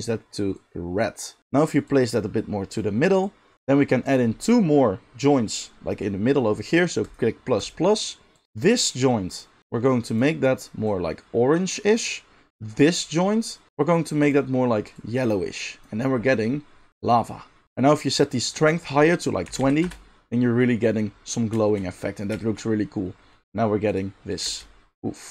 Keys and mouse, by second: 1.9-10.2 drag, 10.2-12.7 middle drag, 12.7-14.3 drag, 14.3-18.5 middle drag, 18.5-25.3 drag, 24.5 space.